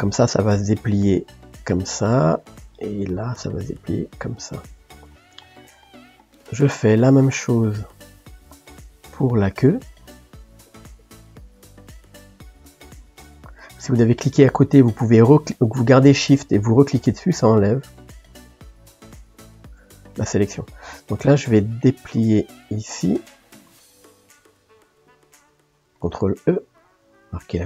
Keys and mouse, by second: 0.0-10.1 middle drag, 10.1 click, 10.7 shift+click, 11.0 shift+click, 11.7 middle click, 12.5 shift+click, 12.8 shift+click, 13.6 shift+click, 16.6 shift+click, 17.5 shift+click, 17.8 shift+click, 18.5 shift+click, 19.0 shift+click, 20.1-22.8 middle drag, 22.8 shift+click, 23.8-26.5 middle drag, 26.5 ctrl+e.